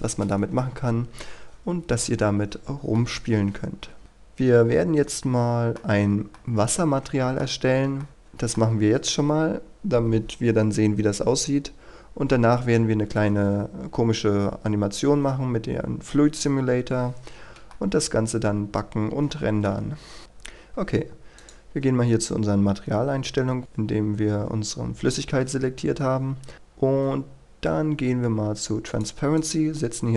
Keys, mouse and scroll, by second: 2.2 KP_3, 3.0-6.0 middle drag, 6.0-6.3 scroll up 1, 6.3-7.6 middle drag, 7.6 scroll down 1, 8.0 shift+middle click, 12.5-13.5 scroll down 1, 15.7-17.5 scroll up 1, 17.7-19.7 shift+middle drag, 21.4-22.4 drag, 26.7-27.5 scroll down 1, 28.9 click, 29.9-30.1 scroll down 1.